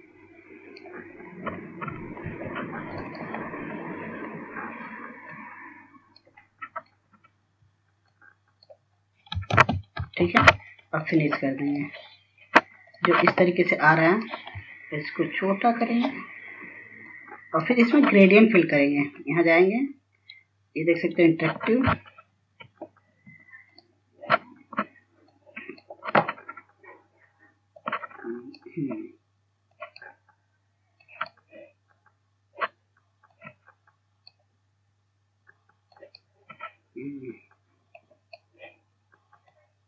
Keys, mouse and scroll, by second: 0.5 click, 2.6 scroll up 1, 3.0 scroll down 1, 3.6 scroll up 1, 4.4 click, 4.8 scroll down 1, 5.7-6.7 scroll up 1, 6.7 click, 7.9 scroll down 1, 8.3 scroll up 2, 9.5 click, 10.4 scroll down 1, 11.0 ctrl+space, 12.5 click, 13.7-14.4 scroll down 1, 14.4 click, 16.8 shift+click, 17.7 scroll up 1, 18.6-36.4 drag, 37.5-39.8 drag.